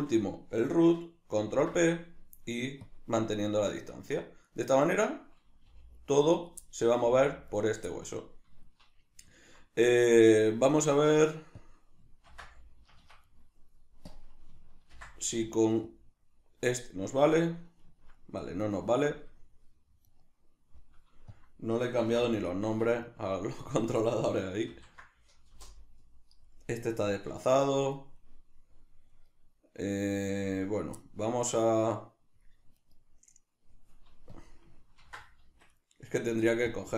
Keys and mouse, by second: 1.4 ctrl+p, 4.5 right click, 4.9 right click, 5.7 g, 6.4 right click, 6.6-7.7 middle drag, 7.0 g, 7.7 right click, 8.0-10.3 ctrl+middle drag, 10.3 right click, 11.5-13.3 drag, 12.9 Escape, 13.3 right click, 14.1-17.1 drag, 17.1-20.1 middle drag, 20.1 right click, 21.3-22.9 drag, 22.6 Escape, 22.9 right click, 23.7-26.5 drag, 25.6 Return, 26.5-28.2 middle drag, 28.2 right click, 29.1 right click, 31.0-32.8 middle drag, 32.8 right click, 34.4-35.8 drag, 35.6 Escape, 35.8 right click, 36.7-36.9 drag.